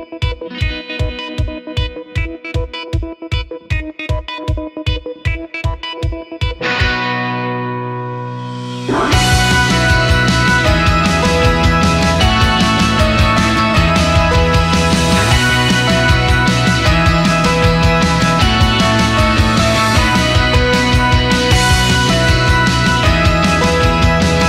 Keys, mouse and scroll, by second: 0.6 scroll down 1, 1.4 click, 1.8 scroll down 1, 2.1-2.5 scroll up 1, 2.8 click, 3.5 click, 4.4 click, 5.4 click, 5.8-7.6 drag, 7.8 click, 8.0 scroll down 2, 8.3-8.6 scroll up 1, 9.0-12.2 drag, 12.8 click, 13.4-14.3 scroll up 4, 14.5-14.9 scroll down 1, 15.3-17.2 drag, 17.4 scroll down 2, 17.6-17.9 scroll up 1, 18.2 click, 19.1-20.1 drag, 20.3-20.6 scroll down 1, 21.1 s, 22.8 s, 23.5-24.0 scroll up 2.